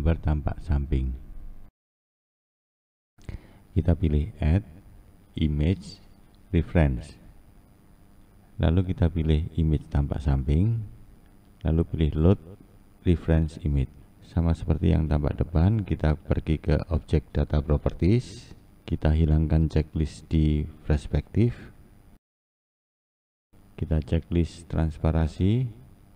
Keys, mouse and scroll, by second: 5.0-8.2 drag, 14.9-18.3 scroll up 4, 18.6-26.1 drag.